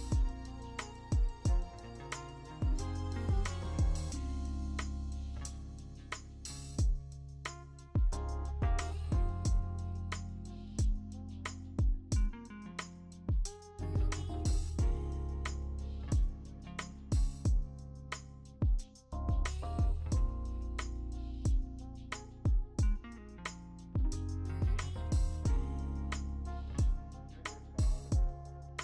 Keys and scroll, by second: 4.2 ctrl+z, 7.2 typing, 8.0 ctrl+z, 10.9-12.6 typing, 21.1 ctrl+z, 21.6 ctrl+z, 23.9-24.8 v.